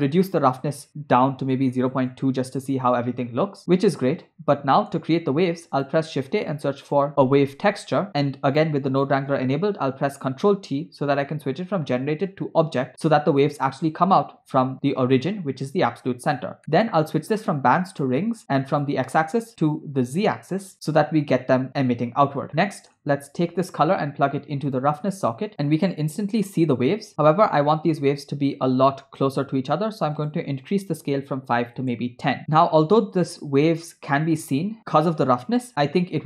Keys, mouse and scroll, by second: 3.5 scroll up 1, 3.6 scroll down 1, 4.6 middle click, 5.3 shift+a, 8.9 click, 10.0 ctrl+t, 12.3-13.1 drag, 16.6 middle click, 17.2-18.2 drag, 18.7-20.4 drag, 22.6 middle click, 23.7-25.1 drag, 27.2-28.3 middle drag, 30.2-31.9 drag, 32.4 middle click, 32.5 scroll up 1, 32.6 scroll down 1, 33.4 space, 34.4 space.